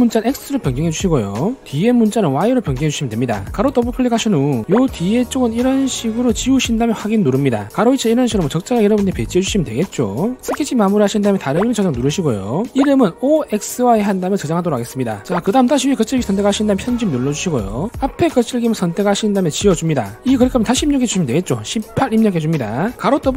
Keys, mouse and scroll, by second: 0.3 click, 0.5 click, 0.7 click, 2.8 click, 3.9 click, 4.2 click, 4.3 click, 7.4 click, 8.4-10.3 drag, 11.2 click, 12.3 click, 16.9 click, 17.0 right click, 18.2 click, 19.5 shift+click, 21.4 click, 21.9 click, 22.3 1.